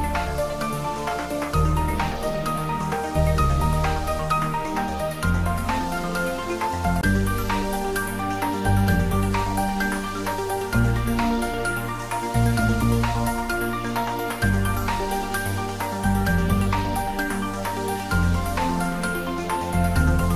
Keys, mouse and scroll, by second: 1.4 click, 1.9 g, 2.2 y, 2.9 Up, 3.9 Down, 4.7 Up, 5.6 click, 6.8-7.7 typing, 8.2 Up, 9.7 Return, 10.5-12.1 middle drag, 11.9-12.9 typing, 13.2 Right, 14.1 click, 15.2 Tab, 16.0-16.4 scroll down 1, 16.4 Tab, 17.4 g, 18.0 x, 18.9 Left, 19.6 click, 20.0-20.3 middle drag.